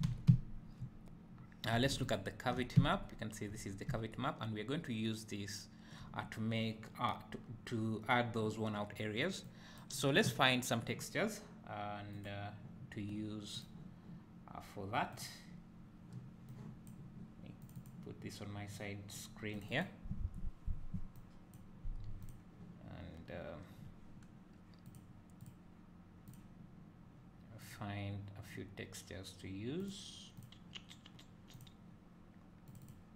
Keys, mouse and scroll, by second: 0.1 alt+a, 2.1 ctrl+shift+click, 2.8 `, 3.7 scroll up 1, 4.1 `, 9.4-12.4 drag, 13.6-15.9 drag, 16.5-33.1 drag.